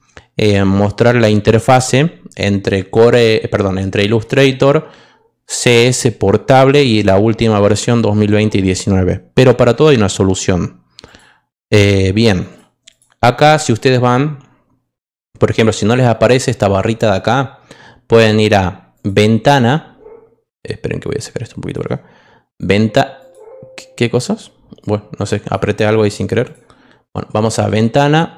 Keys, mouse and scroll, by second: 11.0 click, 18.9 click, 22.5 click, 23.1 click, 24.8 click, 27.4 click.